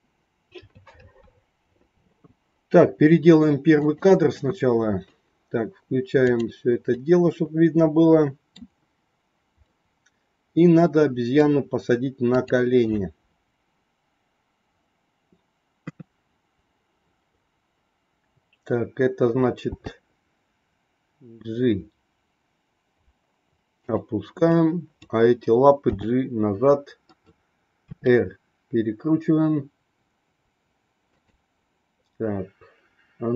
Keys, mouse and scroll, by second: 3.7 click, 6.1 click, 7.0-8.5 middle drag, 9.6-10.9 middle drag, 11.1 middle click, 12.2 click, 15.8 KP_3, 19.7 g, 24.5 click, 25.8 g, 27.8 r.